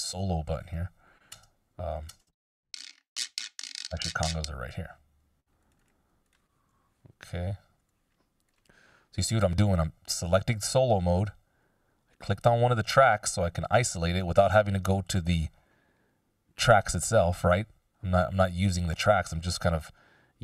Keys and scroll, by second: 1.6 space, 3.7 space, 6.8 \, 7.9 BackSpace.